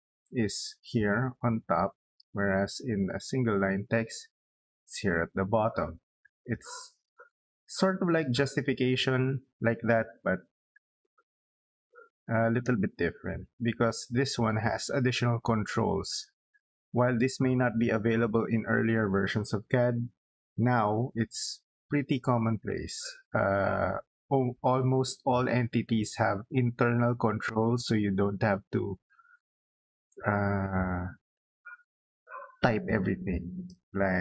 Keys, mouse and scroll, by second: 2.9 click, 5.8 middle click, 8.0 middle click, 9.4 middle click, 12.2 click, 13.0 middle click, 13.8 scroll down 2, 14.0 middle click, 14.4-14.8 scroll up 2, 15.0 middle click, 29.8 middle click, 30.7-31.1 scroll down 2, 31.2 middle click, 32.5 middle click.